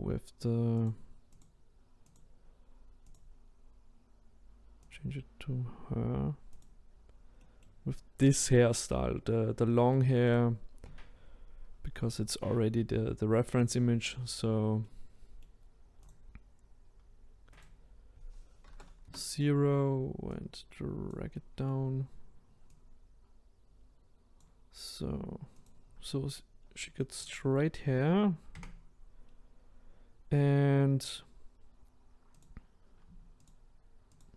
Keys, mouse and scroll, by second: 0.8 click, 1.4 click, 7.4-10.3 middle drag, 10.3 click, 13.7 click, 14.8-16.1 middle drag, 16.1 click, 19.0-20.3 drag, 21.3-22.7 middle drag, 22.7 click, 25.6 click, 26.1-26.6 scroll up 3, 26.6-27.3 scroll down 1, 27.3 click, 28.5 Tab, 29.3 scroll up 1, 29.7-30.7 scroll down 1, 32.4 click, 33.5 shift+click, 34.2 shift+click.